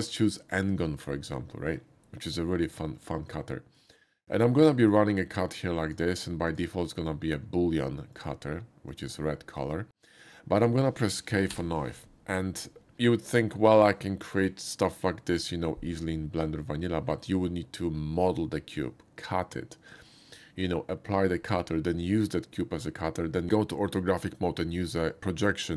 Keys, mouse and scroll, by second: 0.4 click, 3.5 shift+middle click, 4.9-5.9 shift+drag, 8.1 click, 8.9 click, 11.5 k.